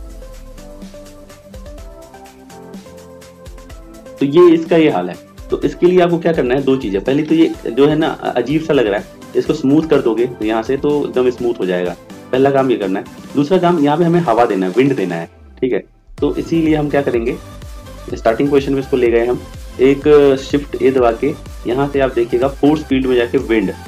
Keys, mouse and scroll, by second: 20.8 shift+a.